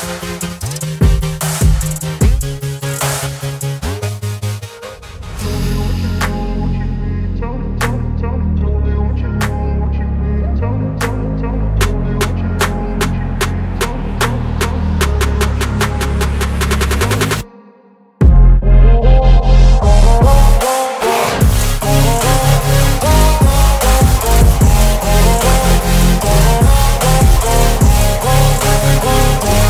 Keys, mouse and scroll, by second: 8.5 ctrl+alt+t, 10.1-11.3 alt+drag, 17.5 ctrl+alt+t, 19.6-22.7 alt+drag.